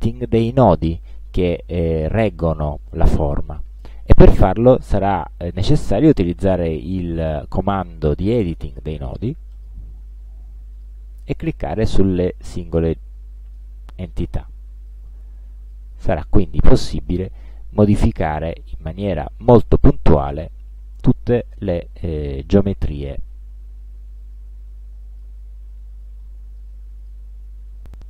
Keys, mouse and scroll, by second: 9.6 click, 10.8 click, 12.9 click, 14.9 click, 16.4 click, 17.3 click, 18.8 click, 20.4 click, 21.6 click, 22.5 shift+click, 24.4 click, 26.6 click, 27.1 click.